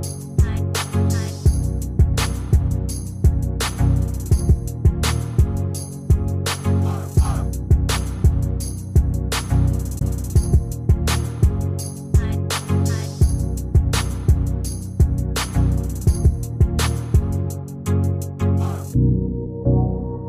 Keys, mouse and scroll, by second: 0.8 shift+click, 3.9 ctrl+scroll up 1, 5.3 shift+click, 6.0 shift+click.